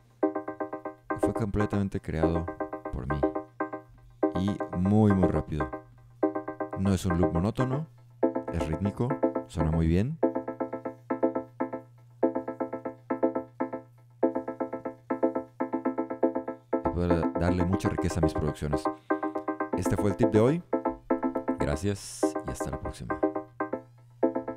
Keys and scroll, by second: 24.3 Tab.